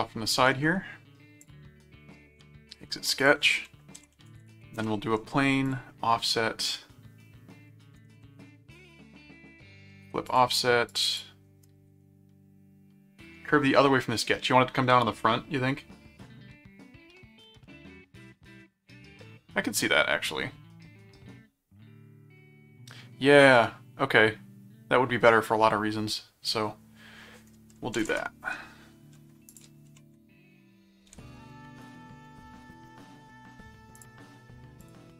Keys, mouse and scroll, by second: 1.4 click, 3.2 ctrl+click, 3.7-4.9 typing, 5.7 click, 8.5 middle click, 10.3 click, 10.9 click, 29.5 ctrl+click, 29.9 ctrl+5, 31.2 ctrl+5, 31.8 click, 33.9 click, 34.8 click.